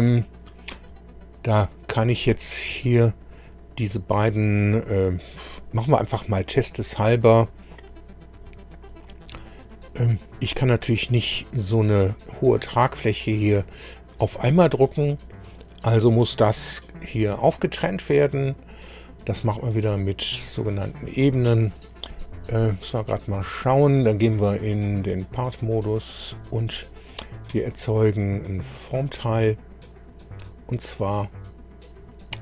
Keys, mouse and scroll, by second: 1.9 click, 3.3 click, 8.4 click, 9.6 middle click, 10.6 middle click, 12.2 click, 12.9 middle click, 13.7 shift+middle click, 14.8-15.8 middle drag, 19.9 middle click, 24.9 click, 25.9 click, 28.9 click, 30.2 click.